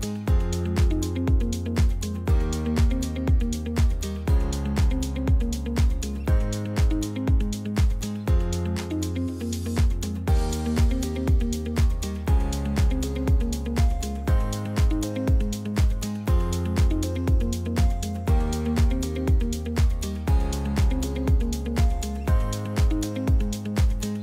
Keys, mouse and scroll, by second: 0.0 scroll up 2, 0.2 middle click, 1.1-3.0 drag, 3.8 Tab, 4.4-4.8 scroll up 5, 5.2-8.5 middle drag, 9.0-9.3 scroll down 3, 9.3-10.8 middle drag, 10.8 Tab, 11.6 alt+h, 11.8 scroll down 1, 12.1-12.8 middle drag, 12.8 scroll up 1, 13.1-24.2 shift+middle drag.